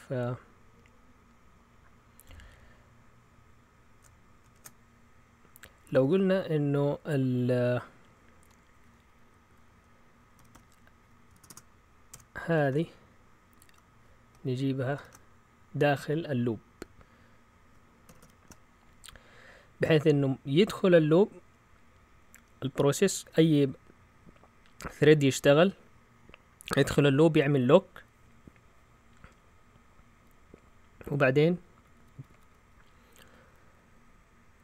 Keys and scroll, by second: 4.5 shift+super+z, 5.8 Up, 6.0 Up, 6.1 Up, 11.3-13.6 typing, 12.1 Escape, 14.7-15.5 typing, 27.2 Down, 30.7 Down, 32.0-32.5 typing.